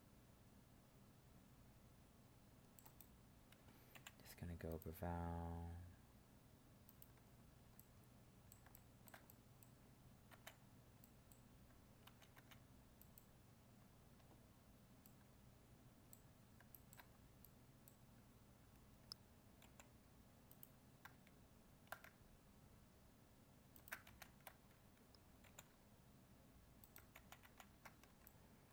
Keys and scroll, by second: 19.6 ctrl+r, 25.4 ctrl+r, 27.1 ctrl+z.